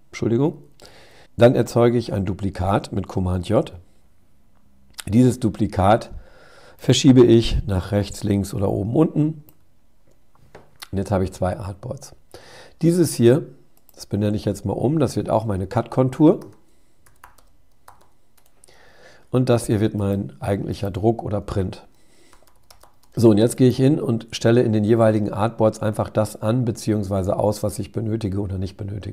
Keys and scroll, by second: 0.3 super+-, 2.3 super+j.